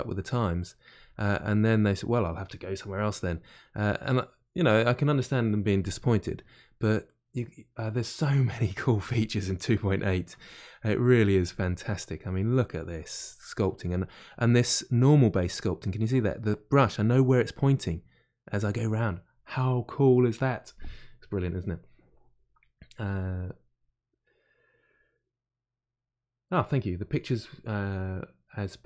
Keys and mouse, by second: 10.8-13.6 drag, 13.6-28.8 middle drag.